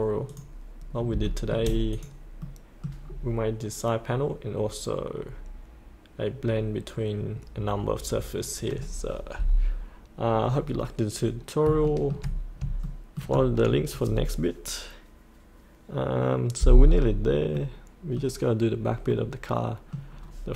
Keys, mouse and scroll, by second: 0.2 click, 1.2 shift+middle click, 1.9 click, 2.1 click, 2.4 middle click, 3.0-5.8 scroll down 1, 11.8 shift+middle click, 12.3-12.6 scroll up 1, 12.8 shift+middle click, 13.6-17.1 scroll down 1, 17.1-17.5 scroll up 1, 17.5 middle click, 20.1 scroll down 1.